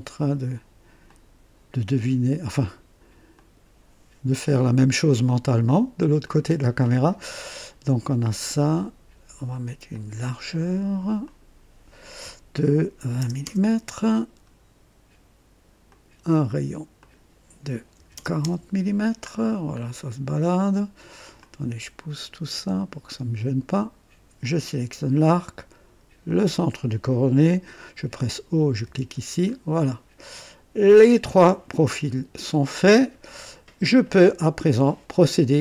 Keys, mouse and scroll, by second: 1.0 click, 3.3 click, 6.2 click, 9.9 click, 11.2 click, 13.0 KP_2, 13.1 KP_0, 13.4 Return, 15.8 click, 17.0 click, 18.0 KP_4, 18.1 KP_0, 18.4 Return, 18.4 KP_Enter, 19.2-19.8 scroll down 1, 19.6 typing, 21.3-21.9 drag, 23.0-23.8 drag, 24.4 click, 26.2 click, 26.4 typing, 28.8 typing, 29.5 scroll up 1, 31.0-31.7 typing, 31.0 click, 31.8 scroll down 1, 32.5-33.0 right drag.